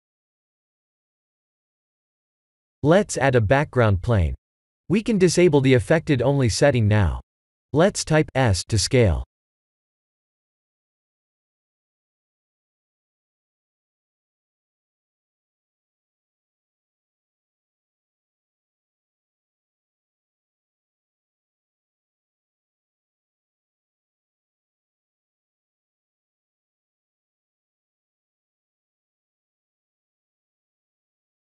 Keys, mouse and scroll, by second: 2.4 middle click, 2.8 click, 3.1 shift+a, 5.6 s, 8.1 ctrl+z, 8.9 click, 9.8 s, 11.5-12.0 scroll down 4, 11.9 middle click, 13.0 s, 14.6 KP_1, 15.7-16.8 scroll up 4, 16.8-17.3 scroll up 1, 16.8 g, 20.0 middle click, 21.2 middle click, 22.1 shift+middle click, 23.1 middle click, 23.6 middle click, 23.7 shift+middle click, 24.2 middle click, 26.6 ctrl+alt+KP_0, 27.3 shift+`.